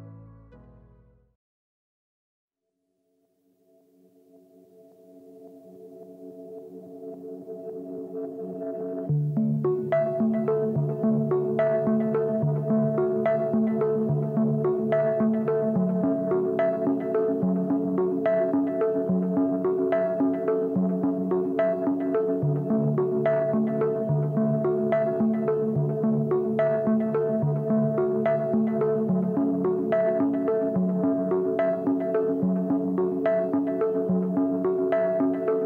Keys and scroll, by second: 7.6 Return, 11.6 ctrl+j, 13.3 Delete, 19.1 Return, 29.6 ctrl+l, 31.6 Return.